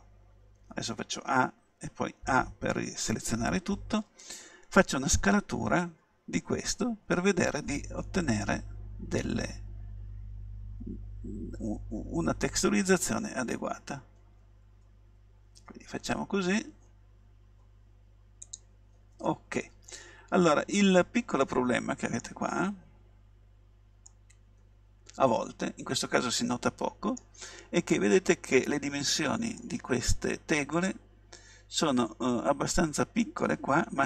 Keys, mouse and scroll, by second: 0.7 a, 2.2 a, 5.4 s, 18.6-20.5 drag, 19.9-21.8 middle drag, 22.8 middle click, 24.3-25.9 middle drag, 29.6-31.6 middle drag.